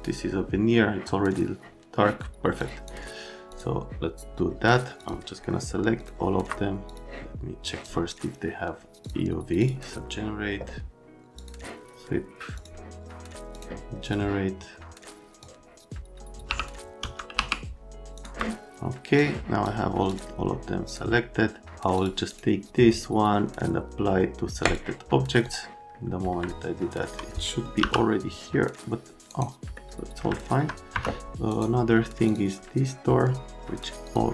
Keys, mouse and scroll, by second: 2.6 click, 3.5 click, 5.0 click, 6.0 click, 6.9 click, 7.6 click, 9.0 click, 9.6 click, 11.4 click, 12.6 click, 13.5 click, 14.1 click, 15.4 click, 16.5 y, 17.0 c, 17.4 q, 18.1 click, 19.2 click, 20.1 click, 20.9 click, 21.9 click, 22.3 right click, 24.7 click, 25.5 click, 27.8 m, 29.3 right click, 29.6 middle click, 30.3 alt+middle click, 30.9 F3, 34.0 middle click.